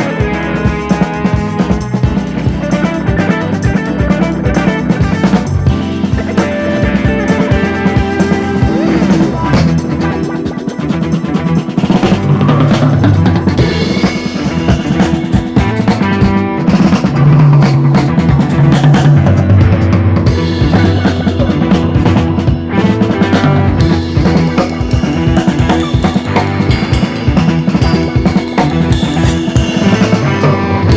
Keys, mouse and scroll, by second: 1.0 KP_1, 1.5 shift+middle click, 2.4 e, 3.5 click, 4.5 s, 6.3-6.6 scroll up 2, 6.6 middle click, 7.0 alt+/, 7.2 alt+/, 7.4 click, 7.7 middle click, 8.2 i, 9.1 i, 9.8 KP_1, 10.4 ctrl+r, 12.1 ctrl+r, 14.0 click, 14.8 Delete, 15.5 scroll down 2, 15.7 alt+/, 15.9-16.9 middle drag, 17.8 click, 18.3 l, 19.3 Tab, 19.5 click, 19.7 click, 20.0 click, 20.2 click, 20.4 scroll down 1, 20.6-21.1 middle drag, 21.1-21.4 scroll up 2, 21.4-22.1 middle drag, 22.1 KP_1, 22.4 scroll up 1, 22.5 Tab, 23.3 click, 24.2 alt+/, 24.8 ctrl+r, 25.9 ctrl+z, 26.3 ctrl+r, 28.8 ctrl+r, 30.8 /.